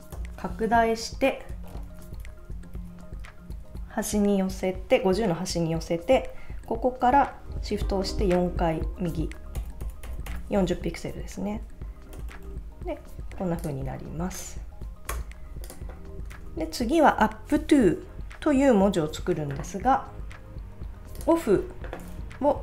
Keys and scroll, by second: 1.9 shift+Left, 2.7 Right, 3.7 Left, 15.1 Return, 16.4 super+s.